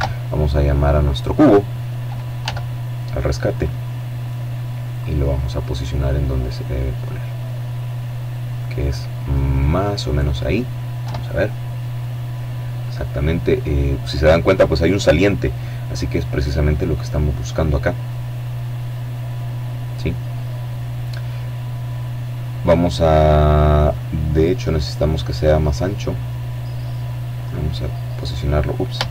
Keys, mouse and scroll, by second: 0.0 click, 1.3 s, 2.4 click, 4.2 middle click, 6.7-7.9 drag, 8.2-9.8 drag, 9.9 KP_7, 14.9-17.5 middle drag, 17.8-19.3 drag, 22.8-26.3 right drag, 26.3-27.6 drag, 28.1 shift+c, 28.9-29.1 scroll up 2.